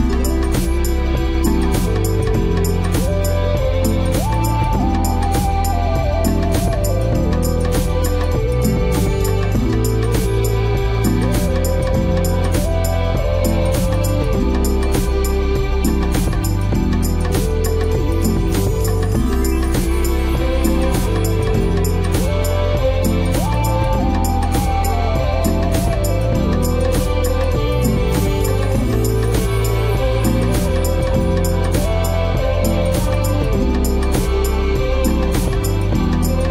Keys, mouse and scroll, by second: 0.7 Escape, 9.5 Escape, 23.5 alt+t.